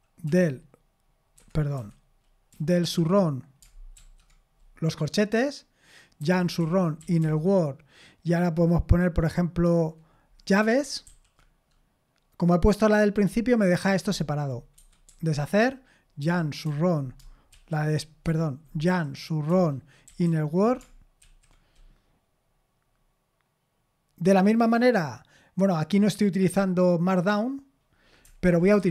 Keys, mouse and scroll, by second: 0.2 s, 1.3 Escape, 1.7-2.8 typing, 3.9 ], 5.9-7.7 typing, 11.0 shift+[, 14.7 Escape, 15.0 u, 16.2-17.5 typing, 18.3 Escape, 18.8-22.0 typing, 28.2-28.9 typing.